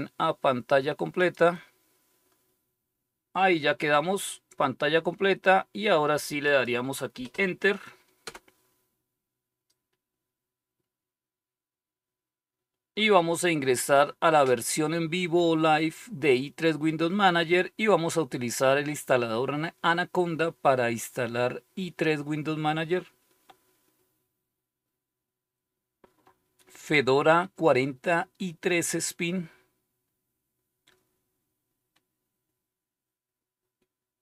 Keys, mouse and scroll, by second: 1.1 click, 6.4 click, 8.1 Return.